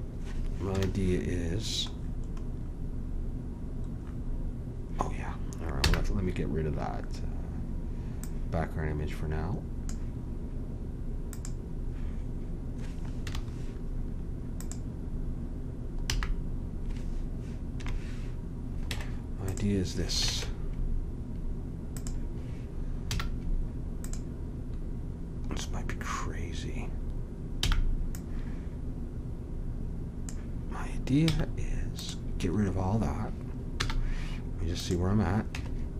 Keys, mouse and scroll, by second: 0.7 KP_1, 5.8 n, 8.2-10.4 drag, 11.3 click, 13.2 KP_1, 16.1 n, 17.7 KP_Decimal, 18.9 Tab, 20.3 ctrl+Tab, 23.1 z, 26.0 middle click, 27.6 b, 31.2 x, 33.8 z, 35.5 Tab.